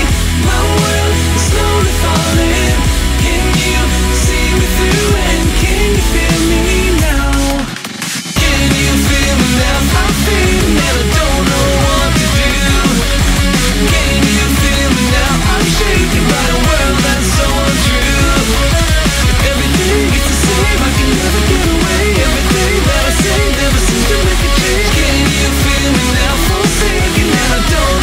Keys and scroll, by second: 0.3 scroll down 1, 1.0-2.7 scroll down 1, 3.9 x, 5.1 x, 6.5 scroll up 1, 7.7 scroll down 1, 8.2 ctrl+z, 8.6 scroll up 1, 8.9 ctrl+z, 9.9 scroll down 1, 10.0 scroll up 1, 10.8 scroll down 1, 11.5 scroll up 1, 11.6 ctrl+z, 11.7 scroll down 1, 13.0 ctrl+z, 13.2 x, 13.7 ctrl+z, 13.8 scroll down 1, 14.4-15.3 scroll down 3, 15.1 ctrl+z, 16.1 ctrl+z, 16.2 scroll up 1, 16.9 scroll down 1, 17.2-17.9 scroll up 1, 17.9 ctrl+z, 18.0 scroll up 1, 18.1 scroll down 1, 18.8 ctrl+z, 19.2-20.0 scroll down 1, 20.0-22.0 scroll up 1, 24.9-25.2 scroll up 1, 25.2 ctrl+z.